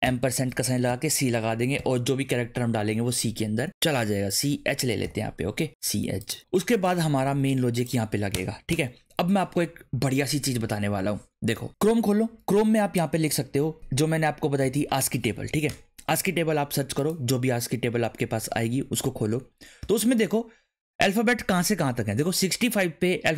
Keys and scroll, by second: 0.0-1.7 typing, 1.2 Right, 5.0 h, 8.3 Return, 8.7 Return.